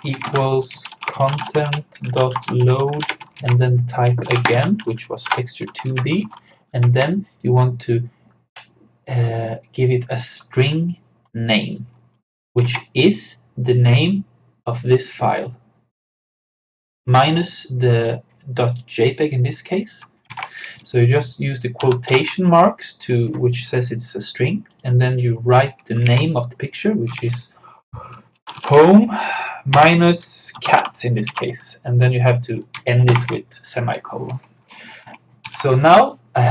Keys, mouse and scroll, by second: 0.0-5.1 typing, 5.3 Return, 5.9 Right, 6.8 shift+8, 12.6 shift+8, 12.7 alt+Tab, 20.3 alt+Tab, 21.9 shift+2, 23.6 click, 26.1 alt+Tab, 27.2 alt+Tab, 28.2-31.3 typing, 32.1 click, 33.1 shift+;, 35.5 ctrl+s.